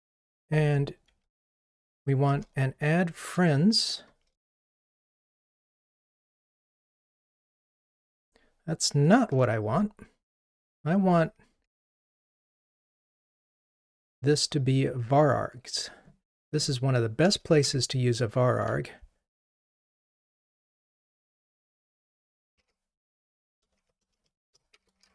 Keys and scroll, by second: 2.3 alt+Return.